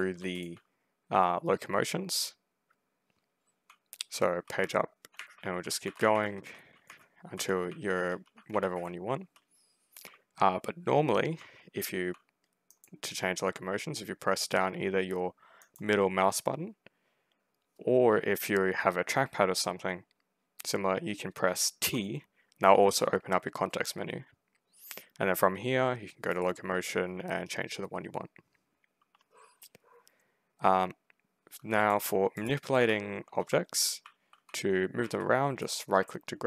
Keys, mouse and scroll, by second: 0.0 w, 0.2 middle click, 3.3-9.5 typing, 11.2 w, 12.6 middle click, 15.5 middle click, 21.7 t, 26.2 click, 31.5-36.4 typing, 31.7 middle click, 32.2 click, 35.5-36.4 right drag.